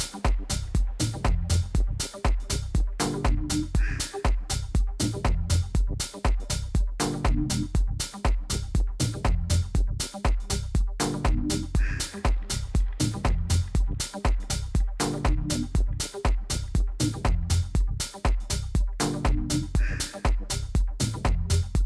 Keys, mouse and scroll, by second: 8.8-10.7 drag, 10.8 KP_3, 11.8 KP_1, 21.1 Tab.